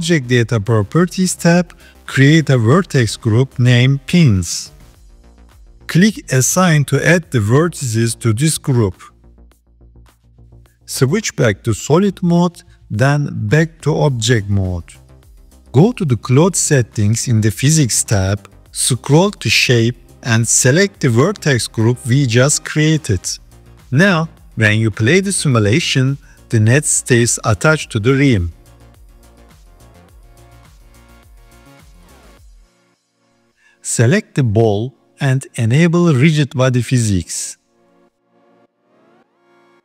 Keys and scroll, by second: 11.5 z, 13.8 Tab.